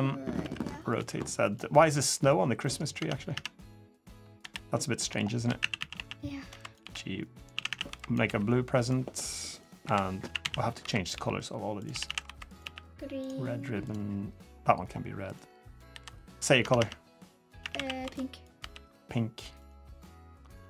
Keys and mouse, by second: 0.2 r, 0.7 g, 1.5 click, 2.4 middle click, 2.7 Tab, 3.1 Tab, 3.4 click, 4.2 l, 4.7 shift+click, 5.4-8.0 typing, 9.6-12.4 typing, 14.4 click, 14.6 middle click, 15.1 click, 15.5 click, 15.7 l, 16.4 Tab, 16.5 Tab, 17.4 a, 17.5 a, 17.8 b, 18.4 g.